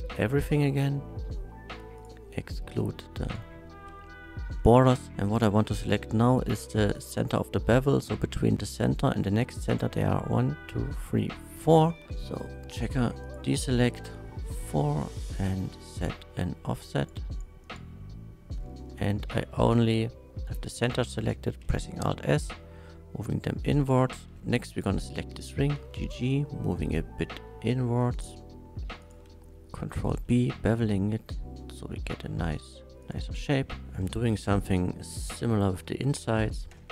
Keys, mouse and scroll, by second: 1.1 2, 2.0 alt+shift+click, 3.2 alt+shift+click, 4.7 middle click, 5.0 click, 5.0 right click, 8.6 middle click, 13.2 click, 16.9 click, 17.6 click, 19.2 shift+middle drag, 19.7-21.0 shift+middle drag, 21.6 alt+s, 23.8 shift+click, 24.1 shift+middle click, 24.7 alt+click, 25.3 middle click, 25.8 g, 25.9 g, 27.0 g, 29.0 shift+click, 29.5 shift+middle click, 30.0 ctrl+b, 33.0 click, 33.8 ctrl+z, 34.3 3, 34.6 click, 35.0 middle click, 36.7 ctrl+KP_Add.